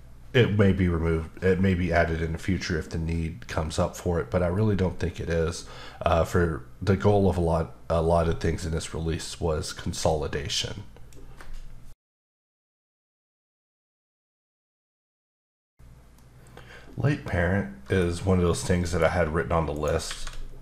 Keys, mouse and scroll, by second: 18.2-18.5 scroll up 1, 18.5 middle click, 19.7 shift+right click, 20.0 shift+a.